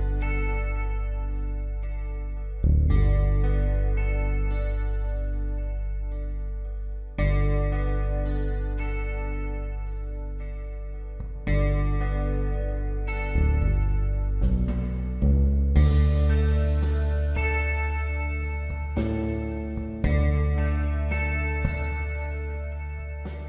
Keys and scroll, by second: 3.7 Right, 3.8 Down, 4.2 Right, 4.4 Down, 7.3 Return, 12.8 ctrl+j, 19.6 space, 21.8 p.